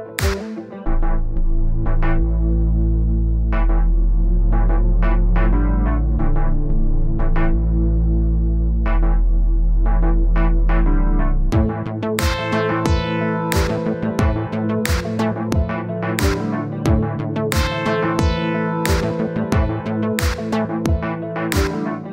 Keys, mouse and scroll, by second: 7.2-13.7 drag, 14.3-22.1 drag.